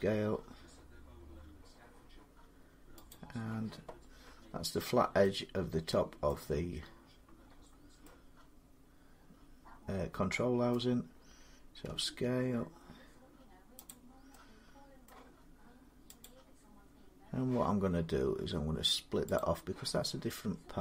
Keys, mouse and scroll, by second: 2.9-4.3 drag, 6.0 middle click, 6.2 scroll down 5, 6.4 scroll up 5, 6.8 scroll down 2, 7.4-7.8 scroll up 2, 8.7 scroll, 10.5 middle click, 11.6 s, 13.7 click, 14.9 middle click, 16.0 click, 19.1 click.